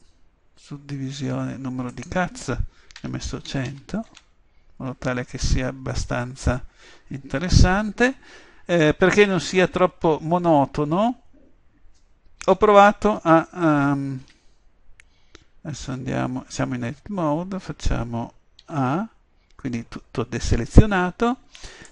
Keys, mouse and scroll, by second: 2.0-3.6 drag, 3.8 0, 18.7 a.